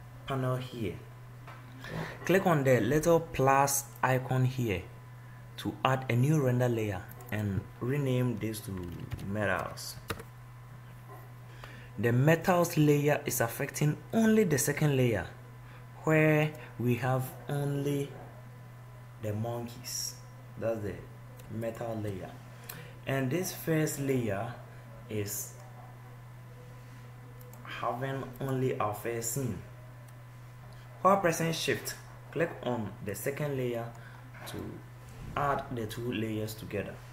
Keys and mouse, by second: 20.1 middle click, 26.3-28.0 middle drag, 28.4 middle click, 31.1-35.7 middle drag, 35.8 middle click, 36.2-37.1 middle drag.